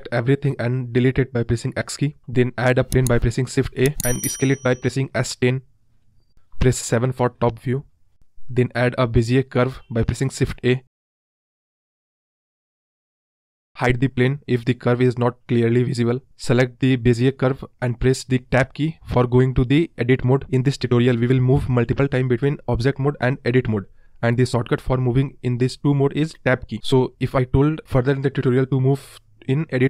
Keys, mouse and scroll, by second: 0.0-1.0 drag, 1.0 x, 1.9 shift+a, 3.8 s, 4.9-6.3 scroll down 4, 8.1 KP_7, 10.1 shift+a, 14.2-15.0 scroll up 9, 15.0-15.4 scroll down 8, 16.5 click, 16.9-17.4 scroll up 1, 17.4-18.1 scroll up 4, 18.1 Tab, 19.5 click, 19.9-20.5 scroll up 1, 20.5 r.